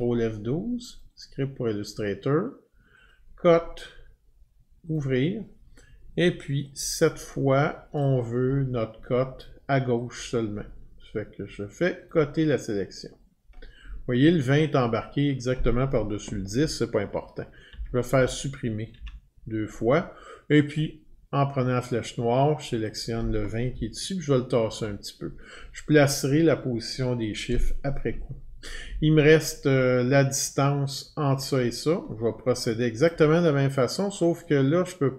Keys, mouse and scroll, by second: 1.0 click, 1.2 click, 3.1 click, 4.9 click, 8.0 click, 10.1 click, 12.1 click, 17.7 Delete, 18.9 Delete, 20.8 click, 22.9 click, 23.7-24.8 Left, 33.1 click.